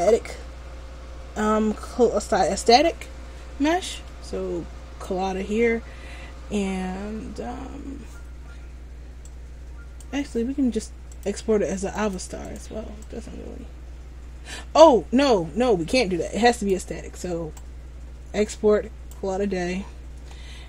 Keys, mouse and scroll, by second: 10.1 click.